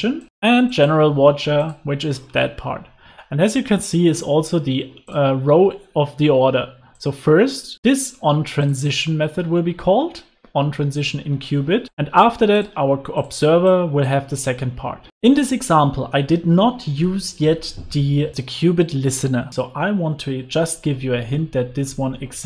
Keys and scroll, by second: 15.2 super+s.